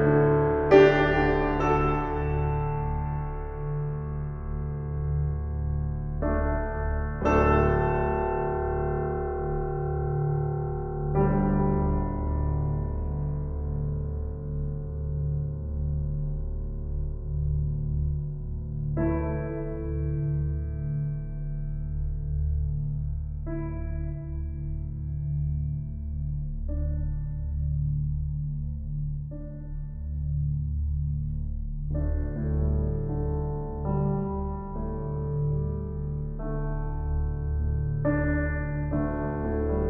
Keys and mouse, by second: 5.3 shift+click, 6.3 shift+click, 7.3 g, 17.1 shift+click, 22.4-22.8 typing, 24.1 click, 25.1-25.5 typing, 27.2 click, 30.9 ctrl+s, 35.9 click, 37.2 F12.